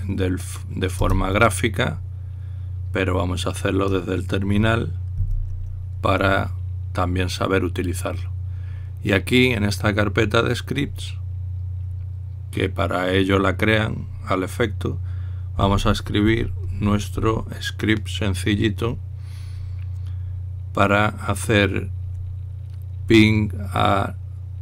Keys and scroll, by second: 0.0-0.2 typing, 1.7 Return, 6.0 ctrl+l.